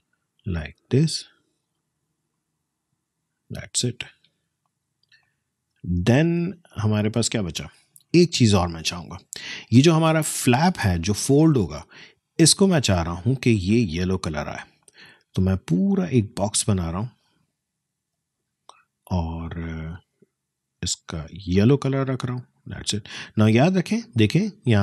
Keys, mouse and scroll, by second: 1.8 alt+scroll up 1, 3.5 alt+scroll down 1, 4.7 click, 4.9 space, 5.2 click, 5.5 space, 6.1-6.8 alt+scroll down 1, 7.5-8.0 alt+scroll up 1, 8.0-8.4 alt+scroll down 1, 8.7 space, 8.9 click, 9.2 space, 13.1-19.9 drag.